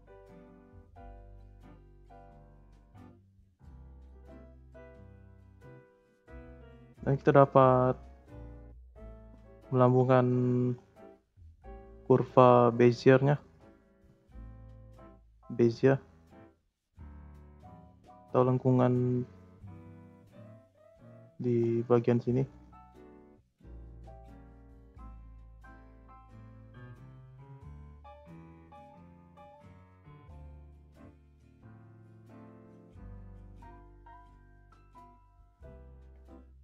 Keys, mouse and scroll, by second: 1.4-2.2 drag, 2.2 space, 3.1 space, 3.6-4.9 drag, 4.9-5.3 scroll up 3, 5.7 click, 6.6 click, 7.0-7.5 middle drag, 7.5-10.4 scroll up 18, 10.7 scroll up 1, 10.7-11.2 middle drag, 11.2 scroll down 5, 11.6-12.0 middle drag, 12.0-12.8 scroll down 4, 13.0-14.7 middle drag, 14.7 click, 15.0 t, 17.0 middle click, 17.3-18.1 scroll up 2, 18.1 click, 18.3 scroll down 2, 18.6 middle click, 18.8 scroll up 1, 19.0-20.5 scroll down 1, 20.5-20.9 scroll down 1, 20.9 scroll up 1, 21.0-23.0 middle drag, 23.0-24.2 scroll up 13, 23.0 middle click, 24.2 click, 24.7 click, 27.1 click, 27.6 click, 27.9 click, 28.5 click, 29.1 click, 29.4 scroll down 4, 29.8 middle click, 30.8 click, 31.2-31.6 scroll up 4, 31.6 scroll down 1, 31.9 click, 32.2 click, 32.5 scroll down 3, 32.6-33.5 middle drag, 33.5 click, 34.5 click.